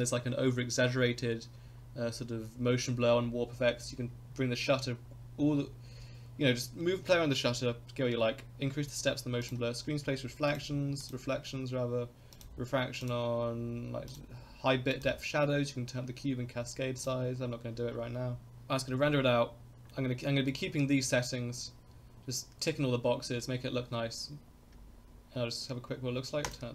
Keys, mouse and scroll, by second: 9.4 click, 10.5 click, 11.0 click, 12.4 click, 13.0 click, 14.1 click, 14.9 click, 17.0 click, 18.4 click, 19.9-20.5 middle drag, 26.4 click.